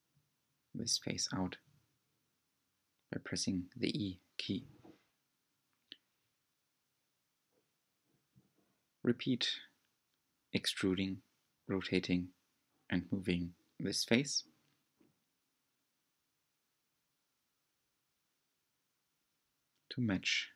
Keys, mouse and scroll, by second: 3.1 e, 5.4 s, 10.4 w, 11.1-14.4 right drag, 14.7 s, 16.7 g, 19.7 s.